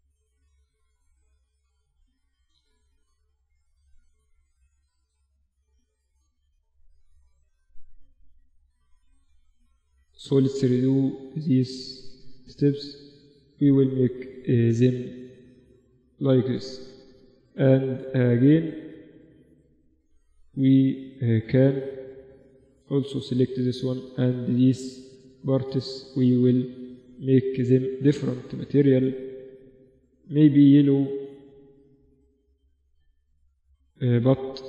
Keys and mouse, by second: 0.1 a, 3.8 Escape, 5.7 a, 5.9 a, 7.4 ctrl+z, 7.8 ctrl+z, 8.2 ctrl+z, 8.4 ctrl+z, 8.6 ctrl+z, 8.8 ctrl+z, 9.0-9.6 ctrl+z, 9.8 ctrl+z, 10.2 ctrl+z, 10.5 ctrl+z, 11.1 ctrl+z, 11.3 ctrl+z, 12.2 Tab, 13.1 Tab, 13.5 Tab, 14.4 click, 14.6 middle click, 15.0 Tab, 16.2 Tab, 20.7 KP_Divide, 22.2 middle click, 22.3 Tab, 22.9-29.3 right drag, 28.6-31.2 drag, 32.6 Tab, 33.8 click.